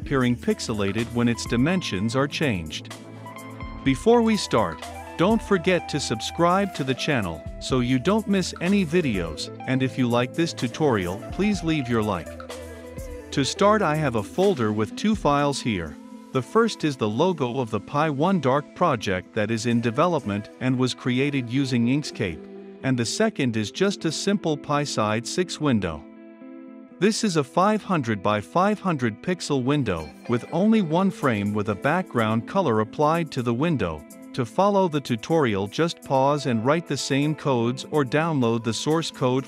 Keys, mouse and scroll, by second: 0.9-2.1 drag, 5.0-6.1 drag, 13.2-18.1 drag, 23.5-24.3 drag, 25.2-28.3 drag, 30.7 click, 31.3 ctrl+F5, 34.0-36.6 drag, 36.8 shift+f, 37.8 ctrl+F5.